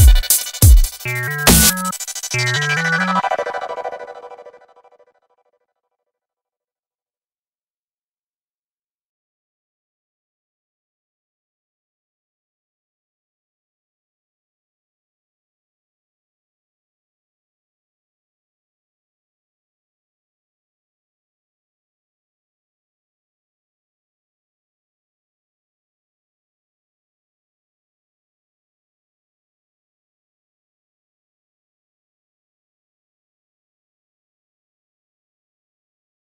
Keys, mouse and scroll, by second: 0.1-2.8 typing, 5.5 KP_0, 6.1 KP_0, 6.7 KP_5, 7.8 right click, 8.7 click, 9.4 t, 9.8 t, 10.3 click, 11.6 z, 12.0 z, 12.8-14.3 drag, 14.7 click, 15.6 n, 16.4 n, 18.6 shift+a, 21.3 click, 21.9 shift+a, 23.4 click, 25.6-28.3 drag, 28.8 shift+a.